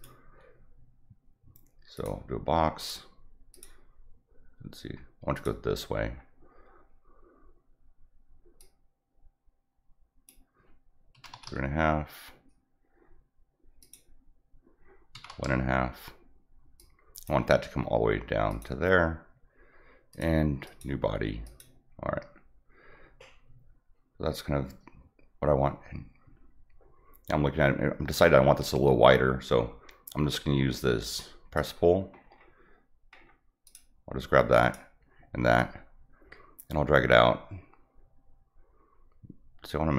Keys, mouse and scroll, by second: 1.9 click, 2.8 click, 3.5 click, 5.3 click, 6.0 middle click, 8.6-10.2 drag, 13.8 click, 16.7 click, 18.5 click, 20.1 click, 20.6 click, 21.4 click, 31.5 click, 32.1 middle click, 32.2 middle click, 33.1 middle click, 33.6 click, 34.6 click, 35.5-39.9 drag.